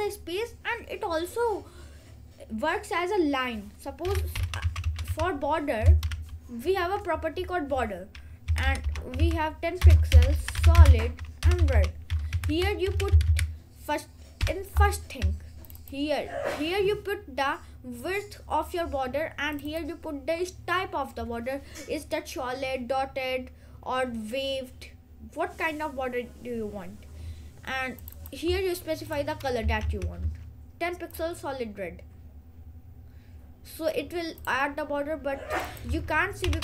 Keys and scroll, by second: 3.9-6.2 typing, 8.4-11.8 typing, 12.4 Left, 13.2 Right, 14.5 ;, 29.9 ctrl+s, 36.4-36.6 typing.